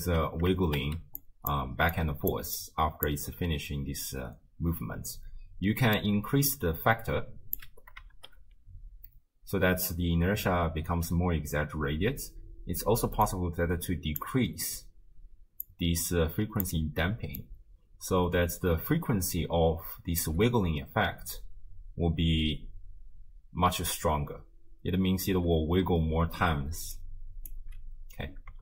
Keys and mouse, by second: 0.5-3.5 typing, 1.2 click, 3.1-3.5 drag, 4.9 space, 6.0-7.6 drag, 8.2 shift+space, 10.9 space, 11.8 shift+space, 13.3 click, 15.7 click, 16.0 click, 17.4-20.2 drag, 20.9 space, 23.5 space, 26.7 d, 27.0 click, 27.5 d, 28.0 d.